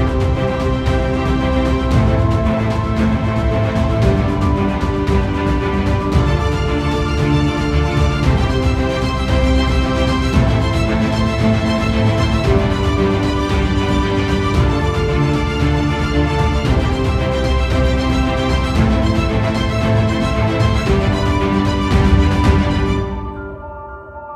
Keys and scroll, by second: 0.6 ctrl+space, 0.9 ctrl+0, 17.6 ctrl+z, 17.9 ctrl+=, 19.5 space.